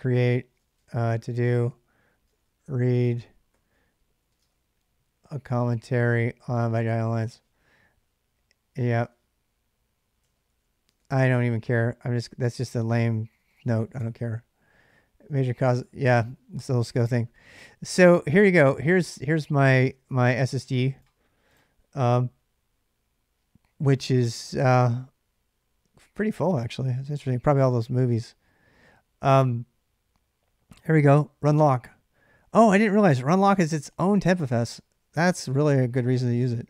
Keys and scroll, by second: 0.0-4.2 typing, 6.9-7.2 typing, 8.8 Return, 10.0 ctrl+[, 10.3-11.6 typing, 12.8-13.6 typing, 13.7 Return.